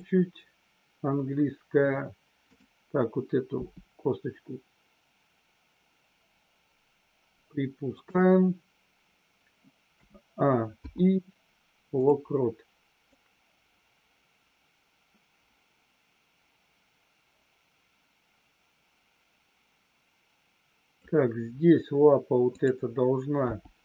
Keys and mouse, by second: 3.5 g, 7.9 click, 10.6 i, 13.0-21.0 drag, 22.5 click.